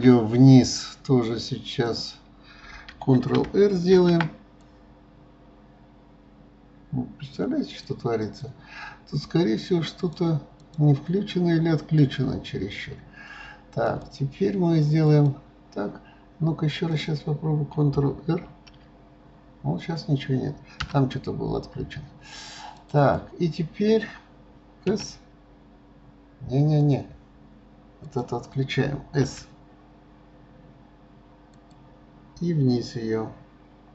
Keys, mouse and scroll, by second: 0.3-1.8 scroll up 2, 1.8 click, 3.9 ctrl+r, 10.0 click, 10.6 click, 11.9 click, 13.8 click, 14.8 click, 15.1 click, 16.9 click, 18.4 ctrl+r, 22.7 click, 23.0 click, 24.9 s, 28.0 click, 29.2 s.